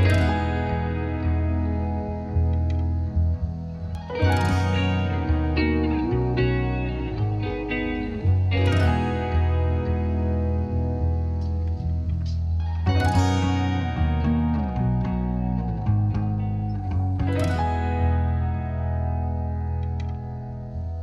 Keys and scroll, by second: 9.7 space.